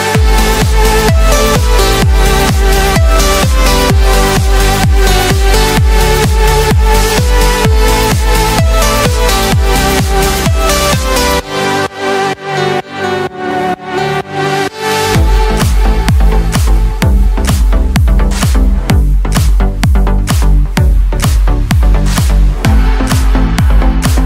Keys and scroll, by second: 15.6 ctrl+z.